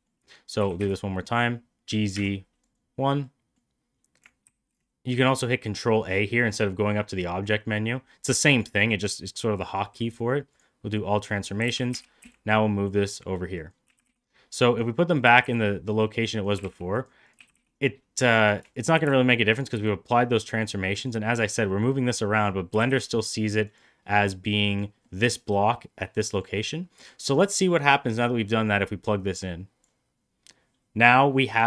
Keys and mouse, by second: 0.5 g, 3.1-3.4 middle drag, 4.3 ctrl+a, 10.8-11.1 middle drag, 11.5 g, 13.7 g, 15.1 g, 16.4 g, 17.1 click, 17.2 g, 18.8 g, 21.1 middle drag, 21.8 middle drag, 22.3 click, 22.6 g, 24.5 click, 24.9 middle drag, 26.1 middle click, 29.0-29.7 drag.